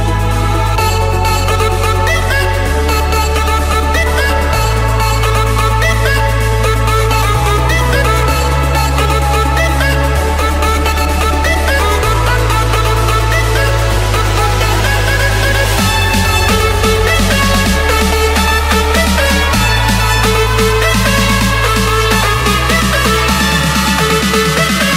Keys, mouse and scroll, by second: 1.0 typing, 3.1 Return, 4.9-6.1 drag, 6.3-8.3 drag, 8.8-10.7 typing, 11.2 Return, 12.2 typing, 14.0-14.6 scroll, 14.6 Escape, 15.5 click, 16.9 click, 17.2-18.2 scroll, 19.1 click, 22.4 click, 24.1 click.